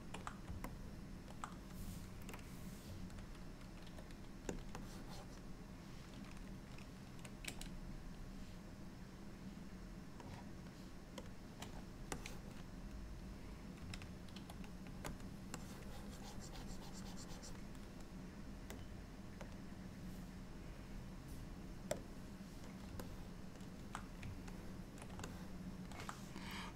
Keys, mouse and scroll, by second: 0.8 middle click, 2.5 click, 3.9 f, 4.9 click, 7.6 n, 10.3 click, 11.3 click, 11.7 n, 12.2 click, 14.4 shift+f, 15.7 click, 23.1 click, 24.6 ctrl+click, 25.4 middle click.